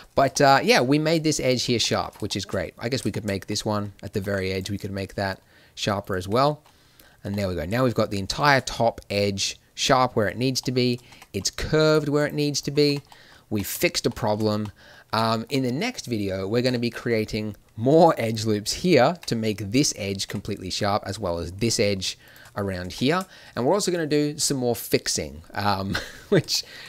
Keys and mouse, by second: 0.3 middle click, 1.0-2.0 right drag, 4.1 ctrl+r, 6.1 Tab, 11.0 Tab, 11.8-12.8 right drag, 12.8 Tab, 13.4 Tab, 14.5 a, 19.1 Tab, 20.2 Tab, 23.4 a, 25.1 middle click.